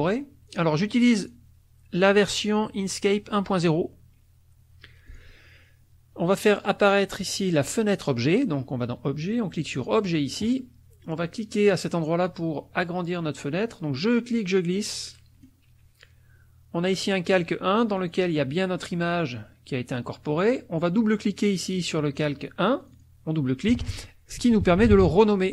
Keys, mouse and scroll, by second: 1.2 click, 2.4 click, 5.0 click, 7.3 click, 9.7 click, 14.1-15.6 drag, 18.0 click, 22.8 click, 24.1-25.4 typing.